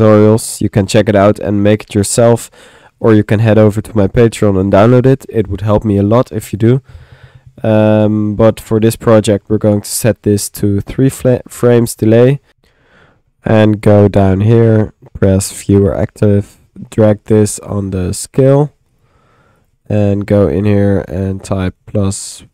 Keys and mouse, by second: 0.6-1.7 drag, 6.6 middle click, 9.0 middle click, 10.5-11.9 drag, 12.1 middle click, 13.4 click, 14.2 click, 15.2 click, 16.6-18.6 drag, 19.6 click, 20.0-22.5 drag.